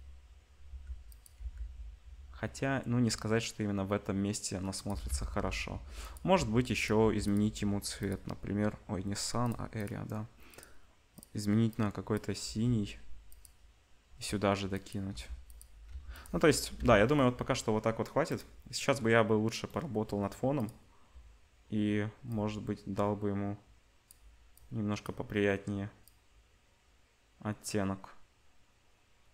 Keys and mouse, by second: 0.6 g, 1.3 g, 4.9 g, 6.3 r, 7.0 g, 7.9 click, 9.4 click, 12.4 g, 14.0 g, 15.1 g, 15.9 g, 16.7 Delete, 18.3 click.